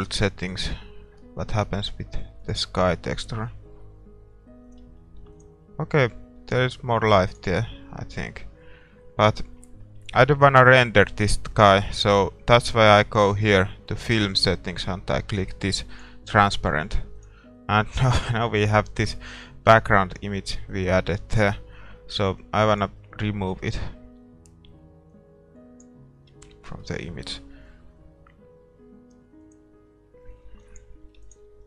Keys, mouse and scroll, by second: 0.8-2.5 drag, 4.9-6.7 drag, 5.4 ctrl+s, 7.5-19.8 drag, 8.6-16.0 middle drag, 18.5-20.4 middle drag, 20.5-22.2 drag, 21.3-22.4 middle drag, 22.7-24.5 drag, 25.2-26.8 drag, 26.6-28.6 middle drag, 29.5-31.6 drag, 31.3 ctrl+s.